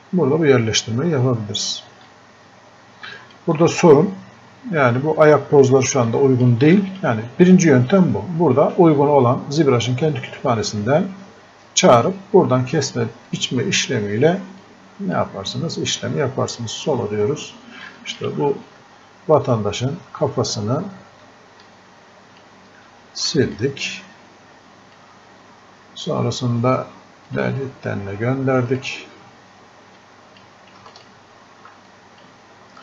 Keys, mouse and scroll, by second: 19.6-26.9 ctrl+shift+drag, 27.3-31.9 drag.